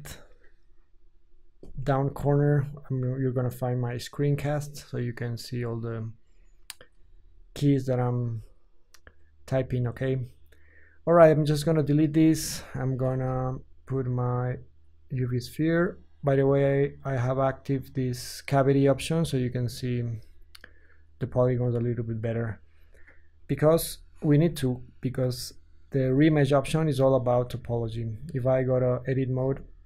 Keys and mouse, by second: 2.3-11.3 middle drag, 11.3 x, 12.2 shift+a, 16.2-17.7 ctrl+middle drag, 17.7-29.8 drag, 23.4 KP_1, 23.6 KP_5, 27.6 Tab.